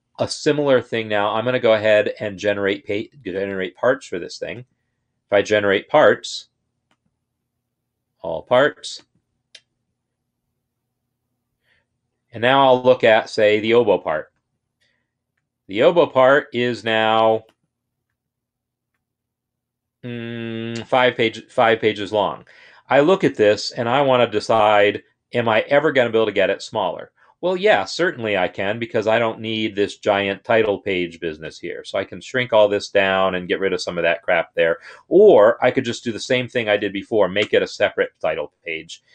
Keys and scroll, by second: 35.8 ctrl+z, 37.3 ctrl+Return.